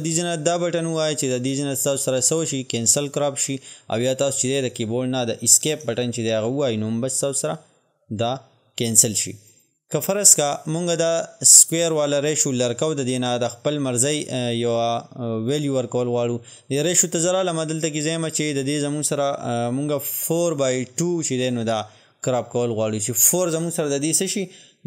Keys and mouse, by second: 3.4-11.9 drag, 11.9 click, 15.6-20.9 drag, 20.9 Tab.